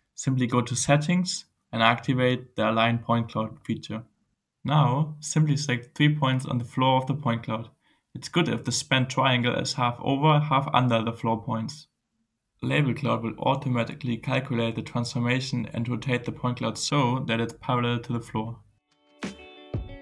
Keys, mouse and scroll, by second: 0.0 click, 4.3 middle click, 6.9 click, 8.5 click, 10.1 click, 11.9-15.2 drag, 15.3 right click, 16.1-17.6 drag, 17.7 right click, 18.3-19.6 drag, 19.7 click, 19.9 click.